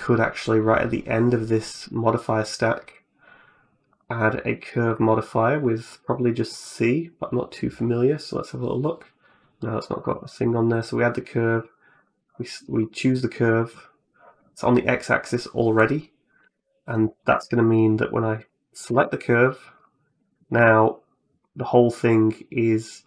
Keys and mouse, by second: 1.7 right click, 3.7 click, 4.1 click, 4.4-9.5 drag, 11.3 click, 12.6 middle click, 13.3 middle click, 15.7 right click, 16.1 right click, 16.3 Tab, 16.8 middle click, 17.1 Tab, 17.5 right click, 17.9 right click, 18.2 right click, 18.7 Tab, 19.6 right click, 20.4 g.